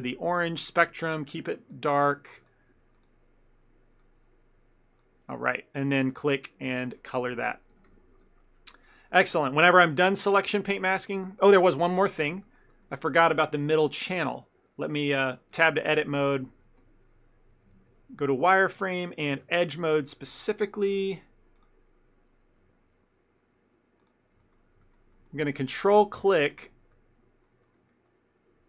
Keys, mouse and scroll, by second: 6.0 click, 6.9 middle click, 7.8 a, 8.0 a, 11.6 shift+middle click, 12.0 ctrl+middle click, 12.3 middle click, 12.5 ctrl+middle click, 12.8 middle click, 13.0 ctrl+middle click, 15.7 Tab, 16.5 z, 17.7 1, 19.3 2, 19.5 middle click, 21.6 click, 22.6 z, 22.9 z, 24.5 shift+middle click, 26.5 ctrl+click, 27.0 middle click, 27.7 ctrl+middle click, 28.0 middle click.